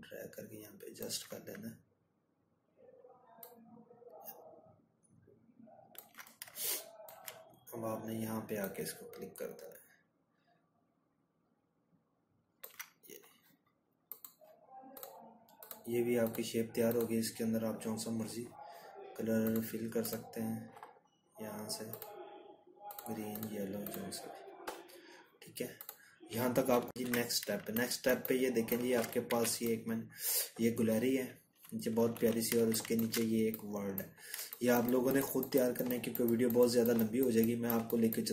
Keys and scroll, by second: 22.4 ctrl+-, 22.6 ctrl+-, 26.1 z, 28.3 ctrl+-, 28.7 ctrl+-.